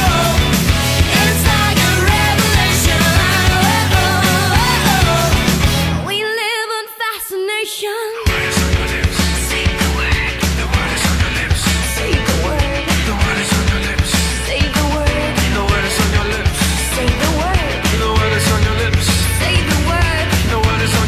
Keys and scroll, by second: 7.5 super+i, 14.9 super+i, 19.3 alt+shift+super+e.